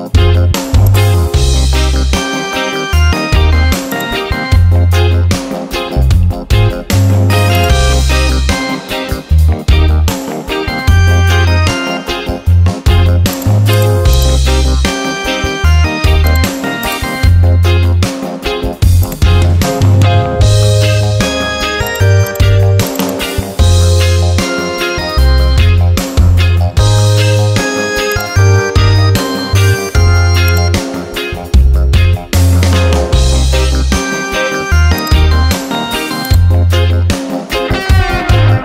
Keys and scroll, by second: 2.0 ctrl+d, 17.2 ctrl+a, 20.3 ctrl+d, 25.3 Return, 32.8 Return.